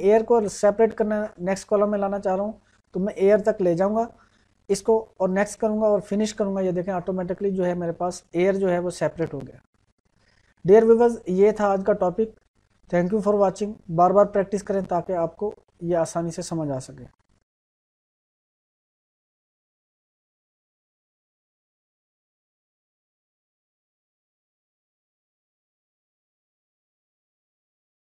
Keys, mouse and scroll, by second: 5.3 click, 9.3-10.9 drag, 13.1 click.